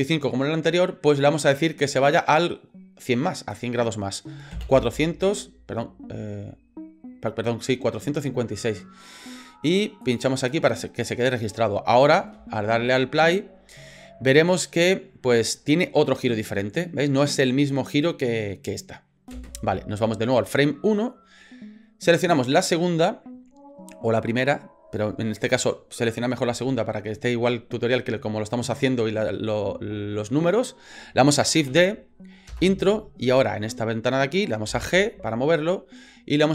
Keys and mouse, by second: 2.0-9.8 drag, 10.0 click, 10.4 click, 12.0 click, 12.3 space, 19.3 space, 20.3 click, 31.8 shift+d, 34.7 g.